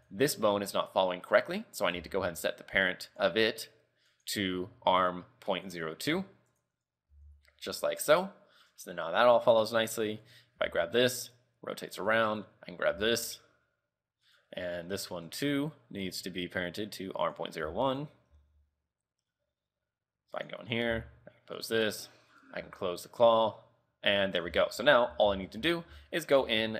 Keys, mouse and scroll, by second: 1.5 right click, 2.1 Tab, 3.2 click, 4.2 click, 6.3 Tab, 6.7 right click, 7.2 r, 10.5 right click, 10.7 r, 12.5 right click, 12.8-13.9 scroll down 2, 13.1 r, 15.2 right click, 15.4 Tab, 16.1 click, 17.8 Tab, 18.1 right click, 18.5 r, 20.8 right click, 21.0 r, 22.5 right click, 22.7 r, 24.7 a, 24.8 a, 25.4 alt+r, 25.7 alt+g, 26.2 shift+middle click, 26.5 scroll up 3, 26.6 a.